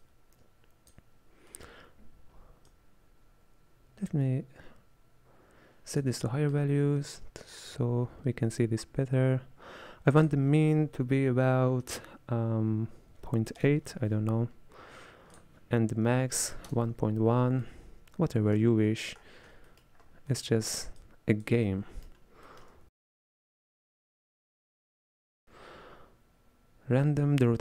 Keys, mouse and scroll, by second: 0.0-1.6 drag, 1.6-2.7 middle drag, 2.7-5.7 drag, 6.6-10.3 middle drag, 10.3-13.4 drag, 15.4 click, 16.3 KP_1, 17.7-19.3 middle drag, 19.3-19.7 scroll down 6, 19.7 middle click, 20.1 scroll up 5, 20.3-21.1 middle drag, 21.1 click, 21.8-22.8 middle drag, 23.9 shift+a.